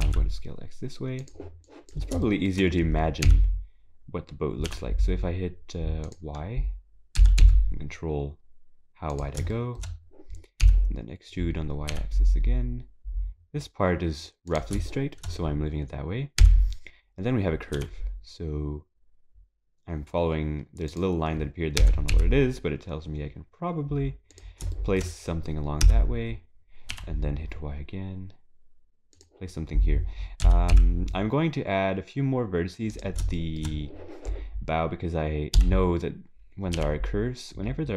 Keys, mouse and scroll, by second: 1.7 click, 2.2 shift+middle click, 2.7-3.2 scroll down 3, 3.2 e, 7.2 s, 9.5 shift+middle click, 9.9-10.2 scroll up 3, 10.6 e, 14.9 shift+middle click, 15.5-16.4 scroll down 2, 16.4 e, 21.8 s, 24.8 shift+middle click, 25.1 scroll up 2, 25.8 e, 30.4 s, 33.4 shift+middle click, 34.8 scroll up 2, 35.6-36.5 scroll up 1.